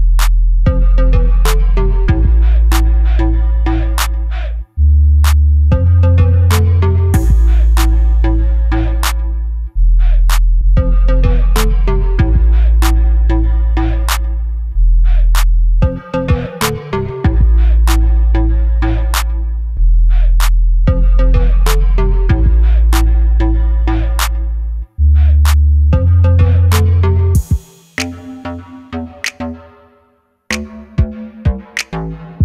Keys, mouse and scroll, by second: 0.0 i, 1.1 click, 1.4 e, 2.7 click, 3.1-9.6 middle drag, 5.3-5.8 scroll up 1, 7.0 scroll up 1, 8.4 scroll up 1, 9.3 2, 9.6 click, 11.1 ctrl+shift+click, 11.6 click, 12.9 middle click, 13.3 click, 13.5-19.7 middle drag, 15.2 scroll up 2, 15.6 scroll down 2, 17.1 scroll down 2, 18.2 scroll up 2, 18.8-19.3 scroll up 2, 19.3-19.7 scroll up 1, 19.7 click, 20.1 3, 20.3 click, 21.0 i, 22.1 click, 22.4 s, 24.3 click, 24.7 g, 27.0 click, 27.7 Delete, 28.7 click, 29.4 click, 30.0 i.